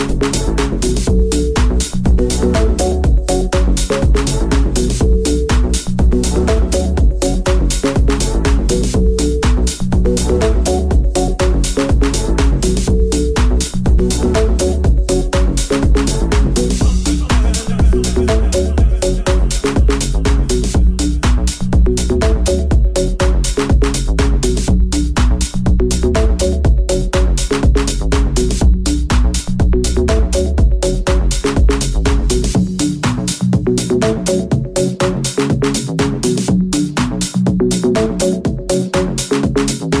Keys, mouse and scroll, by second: 0.8 KP_1, 2.5 middle click, 4.5 Tab, 4.5 s, 5.2 1, 5.9-40.0 middle drag, 15.4 s, 17.5 s, 17.5 f, 21.5-24.1 drag, 24.1 i, 24.3 right click, 24.8 i, 26.3 g, 27.2 alt+right click, 28.1 Tab, 28.8 g, 32.1 r, 32.1 KP_1, 33.3 w, 35.8 KP_5, 37.7 g.